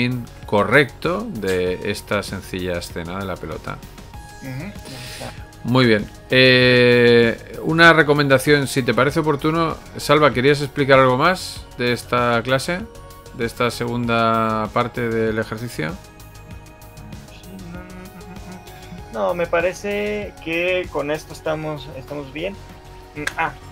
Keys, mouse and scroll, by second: 5.1 scroll down 3, 5.3 alt+a, 5.9 middle click, 6.5 scroll up 2, 6.9 middle click, 7.3 shift+middle click, 10.3 alt+shift+2, 20.1 click.